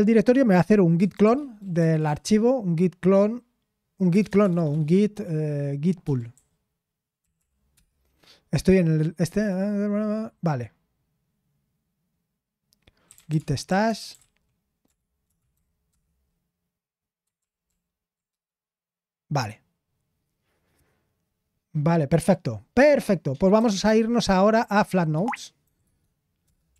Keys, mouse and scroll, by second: 0.7-2.5 typing, 4.1-4.8 typing, 6.0-7.3 typing, 7.7 Return, 12.9-16.0 typing, 17.4 ctrl+p, 17.6 ctrl+p, 18.3 Return, 20.1-20.9 typing, 23.3-26.7 typing.